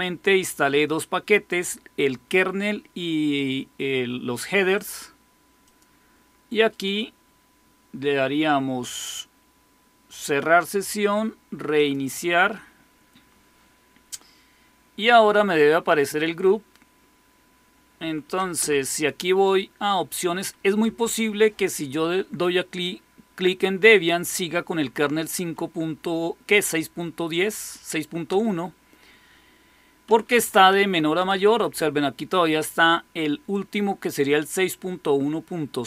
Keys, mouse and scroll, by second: 4.6 click, 5.5 click, 6.6 click, 10.0 click, 11.7 click, 17.9 Down, 18.1 Down, 18.4 Up, 20.7 Up, 24.6 Down, 28.2 Return, 29.9 Down, 30.1 Down, 30.3 Down, 30.5 Down, 30.7 Down, 31.0 Up, 31.2 Up, 31.4 Up, 31.6 Up, 31.7 Up.